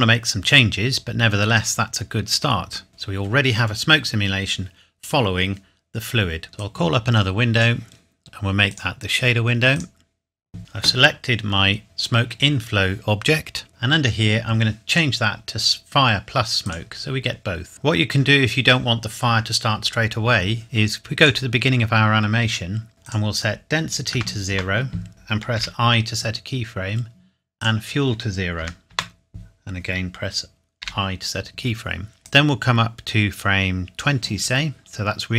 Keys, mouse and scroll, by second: 2.9 ctrl+s, 6.5 click, 16.8 click, 21.2 click, 23.0 click, 24.1 KP_0, 24.5 KP_Enter, 25.5 i, 27.5 click, 28.6 KP_0, 28.9 KP_Enter, 30.8 i, 32.5 click.